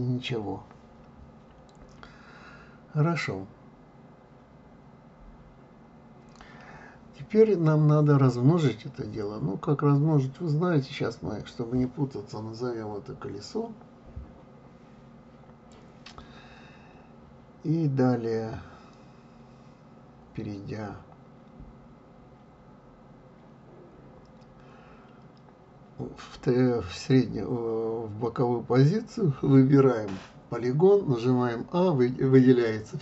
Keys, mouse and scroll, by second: 5.1-5.9 scroll down 3, 5.9-9.0 middle drag, 9.8 click, 12.1 click, 12.6 click, 12.8-15.9 drag, 24.9-27.5 drag, 28.1 click, 28.7 click, 29.9 a.